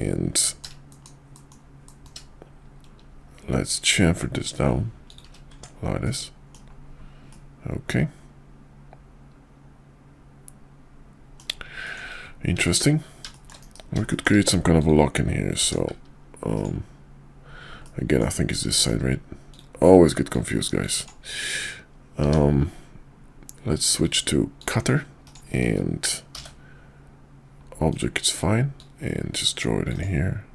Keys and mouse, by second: 0.4 ctrl+b, 5.5 Tab, 6.0-6.5 middle drag, 7.3-11.4 middle drag, 11.8 shift+middle drag, 13.3 shift+middle click, 13.6 KP_5, 14.1 shift+middle click, 14.7 click, 15.6 d, 17.8-18.2 middle drag, 18.7 shift+middle click, 19.5 click, 20.3-21.7 drag, 22.2 d, 26.3 shift+v, 27.9 click, 28.7-30.0 drag.